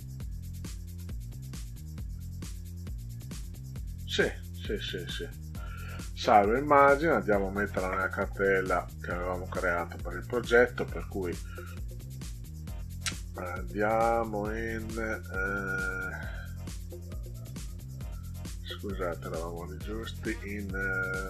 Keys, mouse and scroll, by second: 0.1 middle click, 3.1 right click, 5.8 click, 8.1 click, 10.9-12.0 scroll up 6, 14.6 click, 15.9 click, 16.1 click, 17.4 click, 19.2 click.